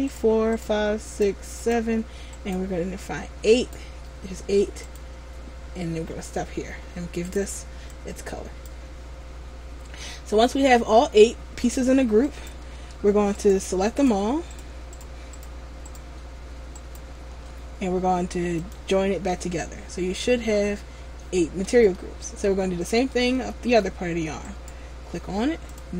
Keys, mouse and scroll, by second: 5.0 click, 12.5 right click, 13.5 shift+right click, 14.7 right click, 15.1 shift+right click, 15.6 shift+right click, 16.0 shift+right click, 17.0 shift+right click, 18.7 click, 22.1 shift+middle click, 23.5 middle click, 24.6 right click, 25.8 click.